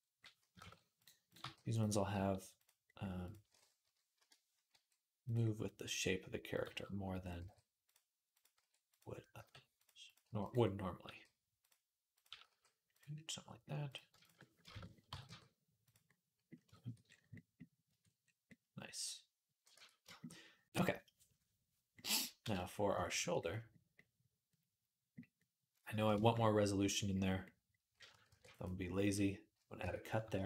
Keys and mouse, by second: 0.4 shift+Tab, 1.1 click, 1.2 g, 1.9 g, 4.5 g, 6.3 click, 6.4 g, 7.2 g, 8.1 click, 8.2-11.9 middle drag, 8.3 g, 9.2 g, 10.0 g, 10.9 g, 11.9 click, 12.1 middle click, 12.1 g, 14.5 shift+Tab, 14.9 g, 15.0-28.0 middle drag, 17.7 Tab, 19.6 Tab, 28.1 ctrl+r, 29.6 Tab.